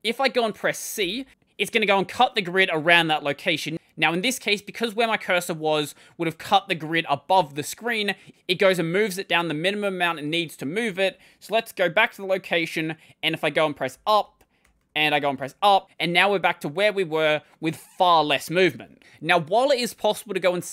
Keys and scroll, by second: 0.8 typing, 10.7 typing, 13.5-15.7 typing.